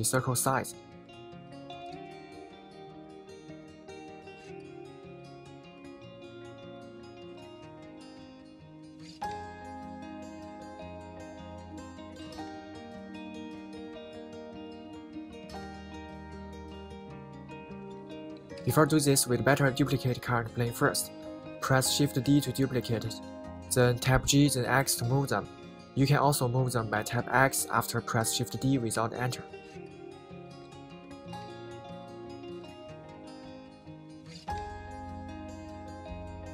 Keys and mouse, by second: 1.6 Escape, 2.3 g, 5.7 Escape, 6.3 g, 17.2 Escape, 18.3 middle click, 19.7 middle click, 21.0 Tab, 21.3-22.1 middle drag, 22.4 middle click, 22.5 click, 23.8 shift+d, 24.5 x, 26.0 right click, 27.0 shift+d, 27.5 x, 28.8 click, 29.6 shift+d, 30.1 x, 31.7 click, 32.9 shift+d, 33.3 x, 34.8 click, 36.1-36.5 middle drag.